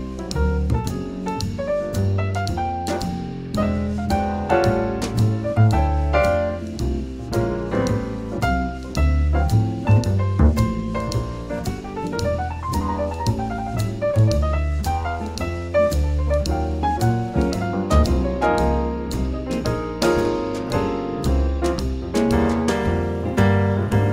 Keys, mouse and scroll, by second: 1.2-2.6 right drag, 3.4-6.7 drag, 6.7 middle click, 9.0-10.9 right drag, 9.5-11.2 drag, 11.4 g, 13.3-15.2 drag, 14.9-16.8 right drag, 15.5-16.8 drag, 16.8 middle click, 17.0 click, 17.2 middle click, 17.9-19.5 drag, 17.9-20.7 right drag, 19.7 g, 20.7 middle click, 21.3-22.9 drag.